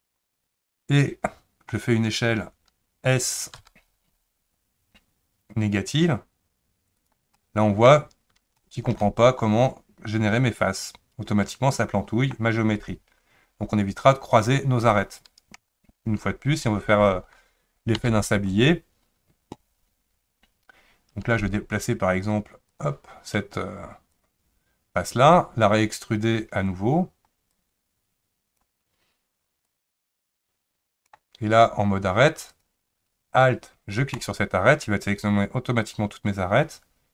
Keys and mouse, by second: 3.5 s, 7.4 middle click, 8.6 shift+middle click, 9.0-12.3 middle drag, 18.0 ctrl+z, 22.7 click, 24.2 click, 27.6-28.6 drag, 29.8-31.1 drag, 32.5 click, 34.1 alt+click.